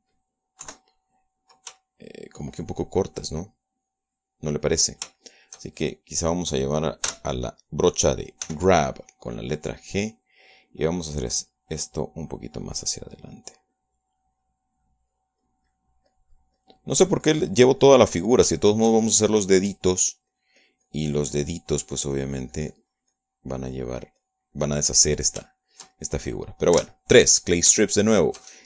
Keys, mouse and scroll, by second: 0.5 shift+middle click, 2.0 KP_3, 3.2 shift+middle click, 6.6 shift+middle click, 7.2 shift+middle click, 8.4 g, 9.8 f, 10.7 click, 11.0 middle click, 12.2 click, 13.4 click, 14.3 click, 15.1 click, 17.4-18.6 drag, 19.2 middle click, 20.0 shift+middle click, 21.2 click, 21.7-25.2 drag, 25.2 click, 26.0 middle click, 26.8-27.9 shift+middle drag, 28.2 shift+3.